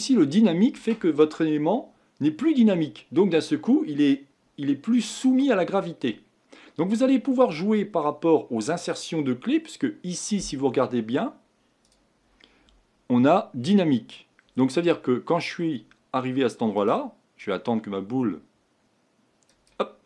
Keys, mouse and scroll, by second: 11.8-14.8 drag, 16.8-20.0 drag.